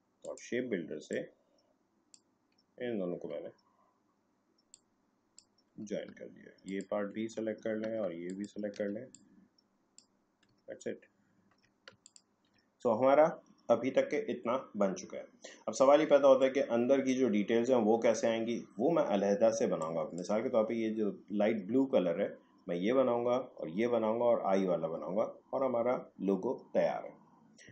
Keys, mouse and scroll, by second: 0.2-10.7 drag, 10.7 alt+scroll down 1, 12.0 ctrl+click, 16.4-18.4 drag, 18.4 alt+scroll up 1, 19.5 space, 19.8 click, 20.0 space.